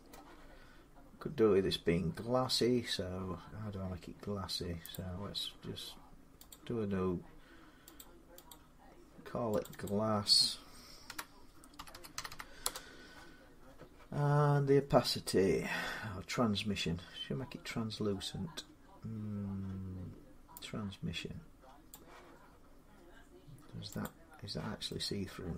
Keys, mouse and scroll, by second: 4.7 click, 6.3 click, 7.8 click, 8.3 click, 9.4 click, 9.7 click, 10.9-12.4 typing, 14.2-14.7 scroll, 14.9 scroll, 21.7 click, 23.8 click.